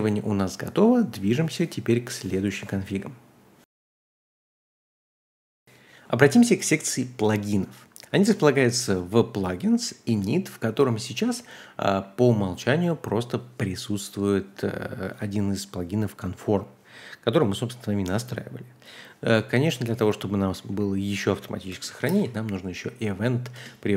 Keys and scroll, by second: 5.6 typing, 6.7-8.6 typing, 8.2 ctrl+h, 9.7-11.9 typing, 20.6 typing, 21.7-22.0 typing, 23.5 Return.